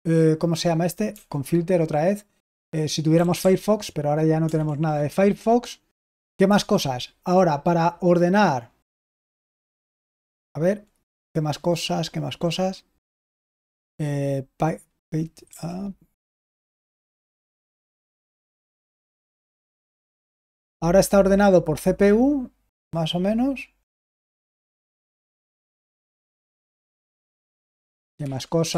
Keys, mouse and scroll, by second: 1.0 typing, 2.8-4.6 typing, 6.4 Escape, 15.4 typing, 17.8 End, 18.6 Home, 19.3 End, 20.1 Home, 23.7 Right, 24.9 Right, 26.6 End, 27.0 Home, 27.4 Home, 28.1 End, 28.6 End.